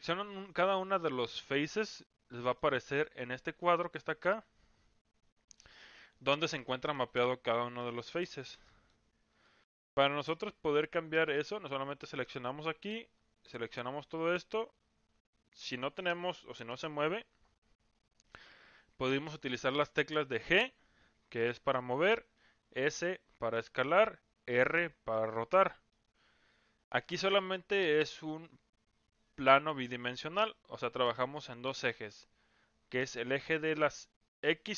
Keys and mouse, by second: 0.3 click, 1.0 middle click, 1.8 click, 2.4 middle click, 7.4 middle click, 8.1 click, 8.6 middle click, 9.3 click, 9.8 click, 10.2 middle click, 13.2-13.8 drag, 20.4 g, 22.6 s, 24.4 r.